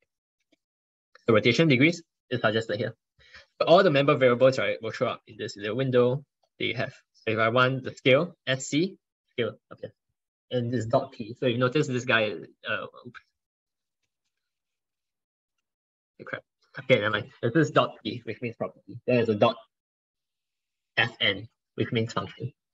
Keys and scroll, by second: 15.4 ctrl+1, 16.1 ctrl+2, 16.2 ctrl+1.